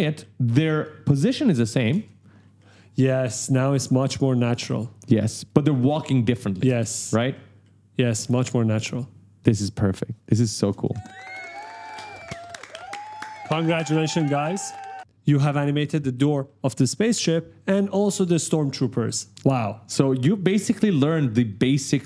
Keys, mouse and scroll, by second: 0.3 q, 1.3 click, 1.7 space, 2.1 right click, 3.9-4.7 typing, 6.1 click, 6.4 space, 6.8 right click, 10.0 click, 10.5 space, 14.7 click, 15.1 space, 15.7 right click, 16.2 a, 17.4 click, 18.0 ctrl+scroll down 1, 19.6 click, 20.6 click, 21.1-21.9 typing, 21.3 right click, 22.0 right click.